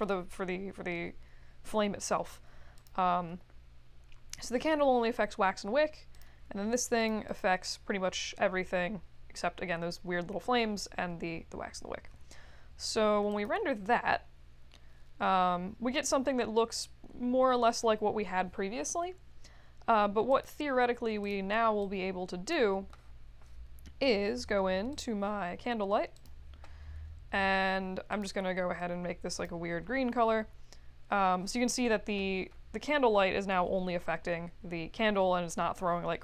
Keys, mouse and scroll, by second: 2.7 click, 6.1 click, 7.0 click, 7.2 click, 13.3 click, 20.2 click, 21.2 click, 21.8 click, 24.9 click, 26.1 click, 28.1 click, 29.2 click.